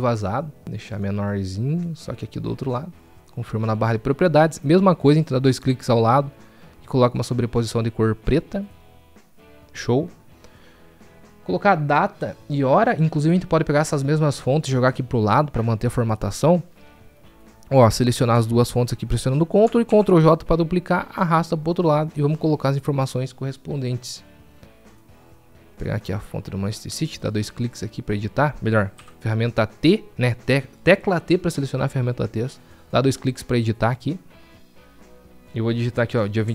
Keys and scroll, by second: 19.7 ctrl+j, 31.3 t, 35.2 t.